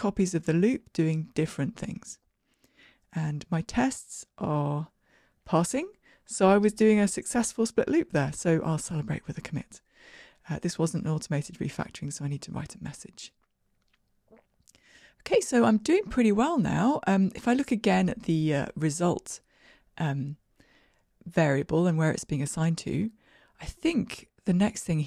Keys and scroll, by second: 3.9 ctrl+r, 3.9 shift+F10, 8.4 super+k, 13.6 shift+Escape.